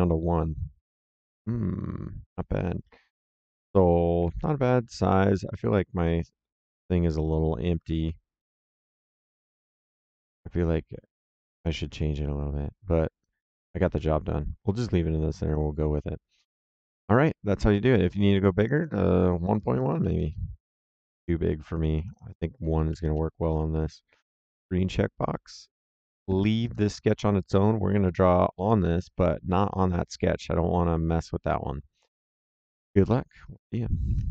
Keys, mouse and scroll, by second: 4.1 Escape, 5.0 click, 13.1 click, 18.5 click, 19.7 KP_1, 19.8 KP_Decimal, 19.9 KP_1, 20.1 KP_Enter, 21.9 click, 22.8 KP_1, 23.0 KP_Enter, 25.6 click, 26.5 right click, 32.0 click.